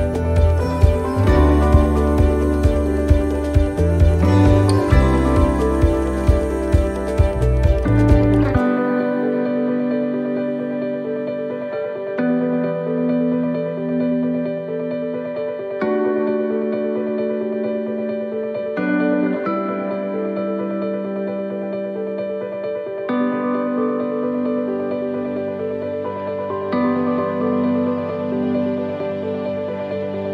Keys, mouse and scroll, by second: 0.8 shift+middle click, 1.3 scroll up 1, 2.0 middle click, 2.0 scroll up 4, 4.4 l, 5.1 l, 7.9 middle click, 7.9 l, 9.9 middle click, 9.9 l, 12.2 middle click, 12.2 l, 13.2 l, 13.8 middle click, 14.6 scroll down 3, 15.0 middle click, 15.5 scroll down 1, 15.9 middle click, 16.5-17.0 scroll up 5, 17.8 scroll up 1, 18.3 alt+shift+right click, 19.0 alt+shift+right click, 19.9-23.3 alt+shift+right click, 23.5 middle click, 24.0 scroll up 1, 24.6 scroll up 1, 24.8 shift+middle click, 26.5 middle click, 28.3 alt+shift+right click, 29.2 middle click, 29.9-30.2 scroll down 1.